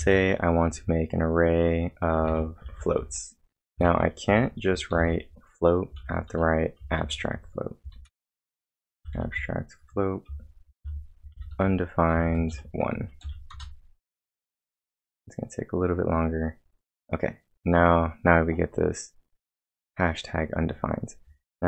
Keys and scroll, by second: 0.0-0.4 typing, 2.1-4.9 typing, 6.0 shift+a, 7.8-13.2 typing, 13.5 Return, 15.4-16.2 typing.